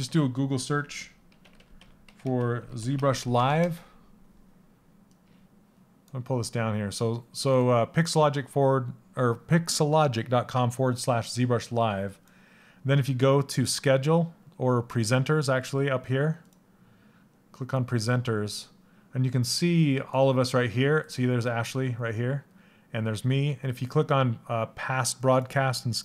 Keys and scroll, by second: 2.9 BackSpace, 3.1 Return.